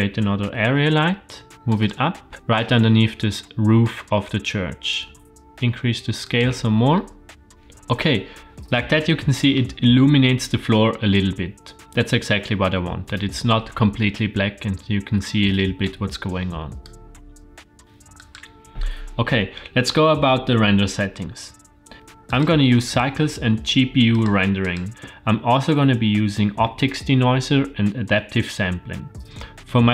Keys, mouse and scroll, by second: 0.4 g, 2.3 middle click, 3.8 shift+middle click, 4.5 g, 7.0 middle click, 7.5-9.4 drag, 7.5 KP_0, 16.8-17.8 drag, 18.1 click, 21.9 click, 22.3 click, 22.8-24.2 drag, 24.6 click.